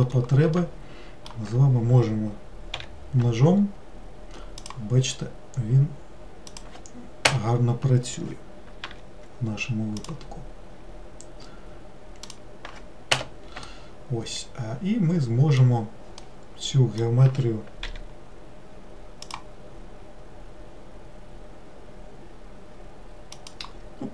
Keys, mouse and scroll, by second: 2.8 k, 8.9 k, 13.7-17.9 middle drag, 17.9 k.